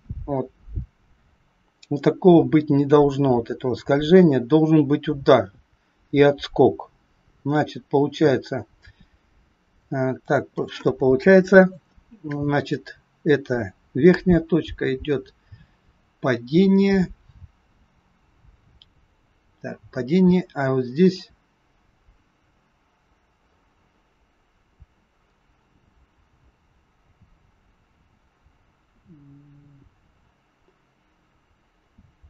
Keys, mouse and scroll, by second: 10.4 click, 12.7 click.